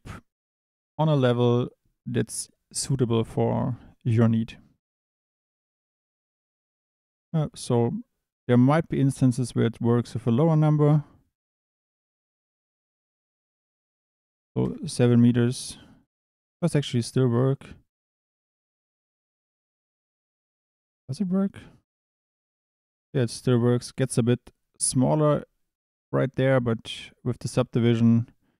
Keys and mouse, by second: 2.3 click, 2.8 click, 3.6 click, 6.7-14.6 drag, 16.0 Tab, 17.0 g, 19.1 Escape, 20.2 click, 21.9 click, 25.2 click, 27.3 click, 27.7 click.